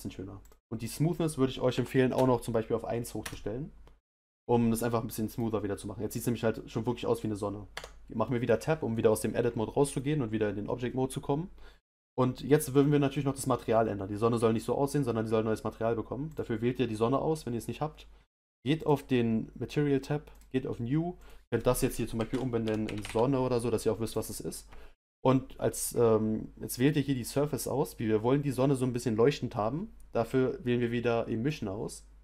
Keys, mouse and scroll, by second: 5.3 click, 7.7 Tab, 16.3 click, 20.4 click, 21.3-24.0 drag, 24.0 n.